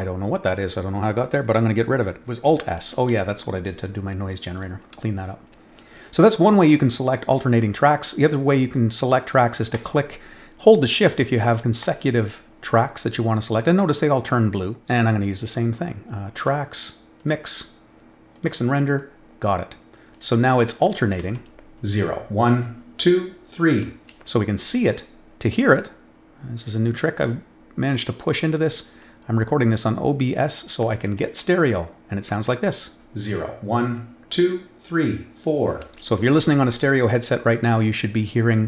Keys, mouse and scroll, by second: 2.8 alt+s, 3.7 click, 4.5 click, 9.7 click, 11.8 shift+click, 16.3 click, 17.1 click, 18.3 click, 20.1 click, 21.1 space, 23.9 space, 26.6-27.8 drag, 29.0-30.3 drag, 31.2 click, 32.2 space.